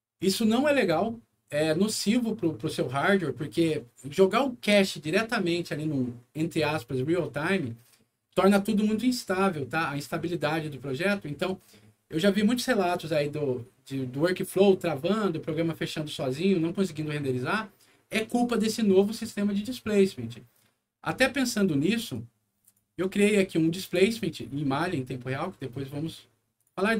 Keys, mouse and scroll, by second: 22.1 click, 23.8 click, 26.5 click.